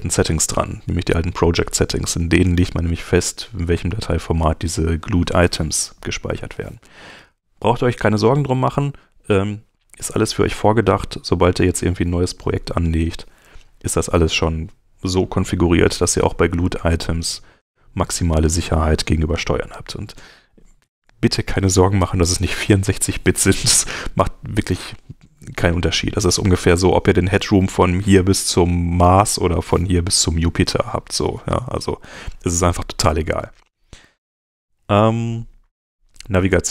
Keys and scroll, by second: 11.2 Escape, 31.4 super+End.